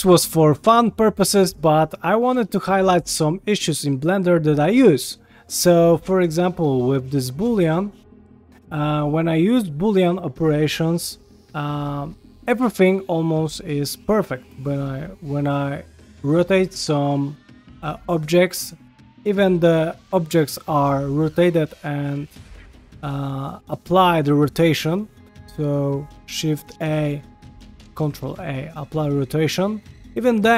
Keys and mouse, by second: 3.7 middle click, 4.3 shift+middle drag, 5.6 ctrl+middle drag, 6.3 shift+middle drag, 6.6 ctrl+middle click, 7.1 shift+d, 8.9 click, 9.6 shift+click, 11.1 ctrl+KP_Add, 12.8 ctrl+middle click, 13.8 click, 14.8 r, 18.9 ctrl+middle click, 25.3 q, 26.7 shift+a, 28.0 ctrl+a, 29.9 ctrl+middle click, 30.3 shift+middle click.